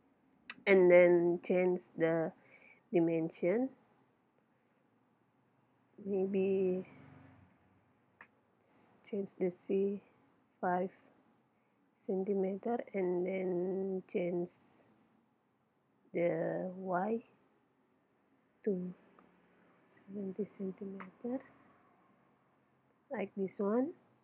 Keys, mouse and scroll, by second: 1.3 n, 3.9-5.7 drag, 10.3-12.0 middle drag, 17.9-19.8 drag, 22.2-24.2 middle drag.